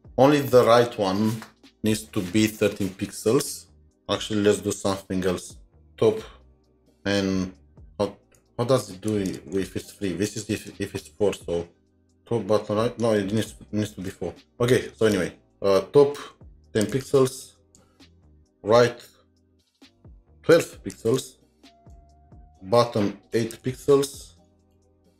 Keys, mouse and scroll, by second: 4.6 typing, 8.4 Left, 9.4 ctrl+shift+Right, 10.6 Delete, 13.4 Delete, 15.0 shift+Right, 16.3-17.6 typing.